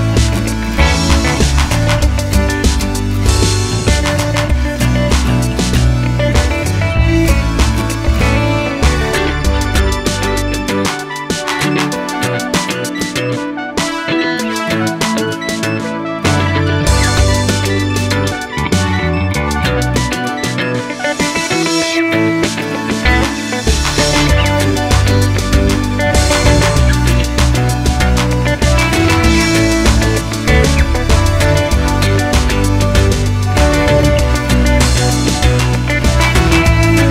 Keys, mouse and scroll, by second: 1.4 click, 3.9-7.0 middle drag, 3.9 g, 7.0 click, 7.2-16.2 middle drag, 8.9 ctrl+z, 10.9 g, 13.7 g, 16.2 click, 16.7-19.6 middle drag, 19.6 click, 20.7 g, 21.9 click, 22.1-23.4 middle drag, 22.8 g, 23.4 click, 24.0 r, 25.2 click, 25.3 g, 27.2 click, 27.3-29.8 middle drag, 29.2 g, 29.8 click, 30.0-31.7 middle drag, 31.7 click, 32.6-35.2 middle drag, 35.2 click, 37.0-37.1 drag.